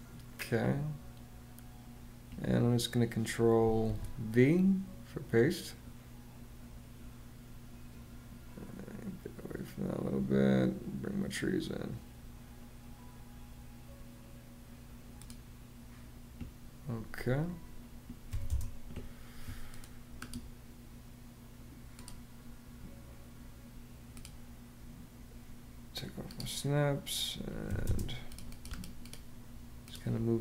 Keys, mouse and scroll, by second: 3.6 super+v, 18.0 m, 18.2 space, 27.4 m, 27.6 space.